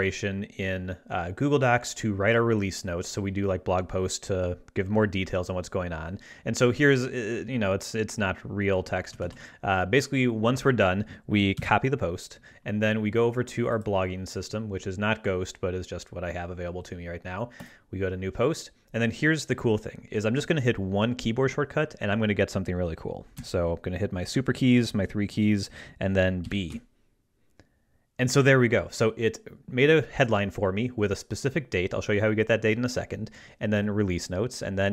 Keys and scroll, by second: 9.2 super+a, 11.6 super+c, 26.4 ctrl+alt+super+b, 26.7 ctrl+alt+super+e, 27.8 e.